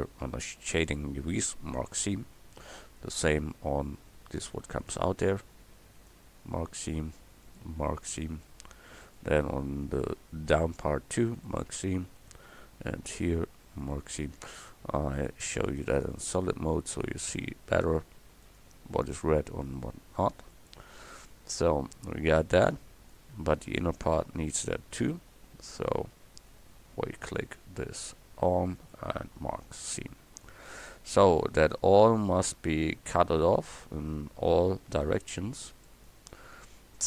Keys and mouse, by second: 7.6 middle click, 8.9 middle click, 14.3 click, 16.1 click, 22.4 middle click, 22.8 click, 23.6 right click, 24.1 click, 25.9 click, 26.5 middle click, 26.8-28.9 right drag, 29.5 right click, 30.2-33.4 drag, 35.1-36.8 shift+middle drag.